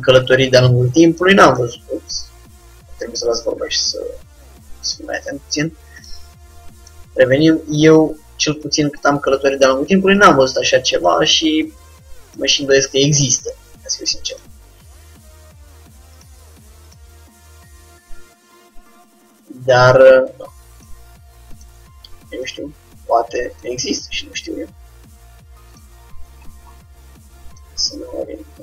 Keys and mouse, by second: 4.7 g, 6.9-8.6 drag, 7.1 g, 11.1-12.8 drag, 11.3 g, 13.3-14.5 middle drag, 14.5-16.2 drag, 15.3 g, 17.0-18.5 drag, 17.2 g, 21.6-26.1 drag, 24.9 g, 26.5-28.6 drag, 28.2 g.